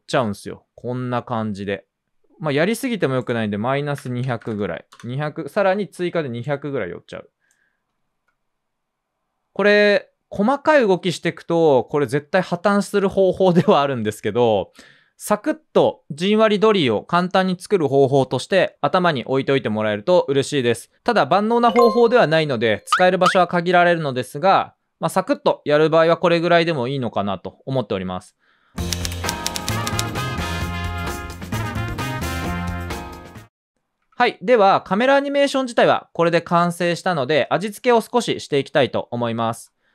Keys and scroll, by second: 2.1 typing, 3.7-5.4 typing, 7.8-8.5 typing, 14.8 typing, 25.1 Return, 25.2-28.2 typing, 33.7 space.